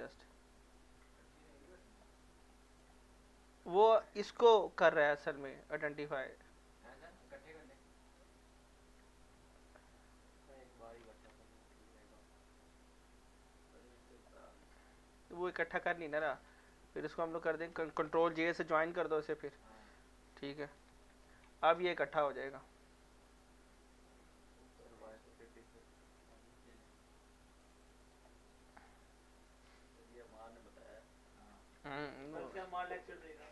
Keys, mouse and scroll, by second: 2.2 middle click, 2.7 click, 8.5 shift+click, 10.6 click, 11.1 ctrl+z, 12.1 click, 14.6 middle click, 14.8 middle click, 16.3 ctrl+z, 16.6 click, 17.4 shift+click, 20.8 ctrl+j, 22.4 click, 25.9 click, 28.6 middle click, 28.9 scroll down 1, 29.1 middle click, 30.0 middle click, 30.4 scroll down 1, 30.7-32.3 middle drag, 32.3 click, 32.9 middle click.